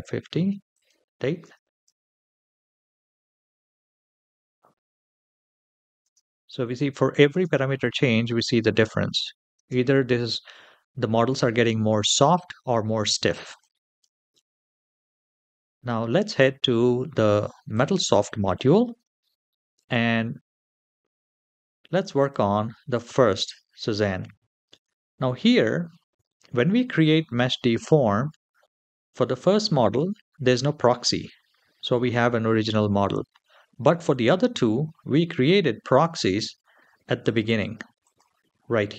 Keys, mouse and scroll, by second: 0.5 click, 1.2 space, 5.9 space, 6.4 click, 7.1 space, 9.3 space, 13.2 click, 14.7-16.1 scroll up 4, 17.5 click, 22.1-25.0 drag, 37.0-38.9 drag.